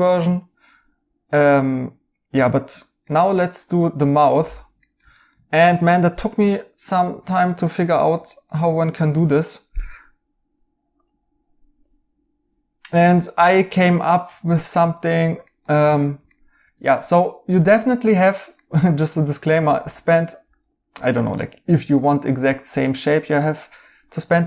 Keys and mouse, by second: 4.0 right click, 7.3 right click, 14.3 right click, 19.9 right click.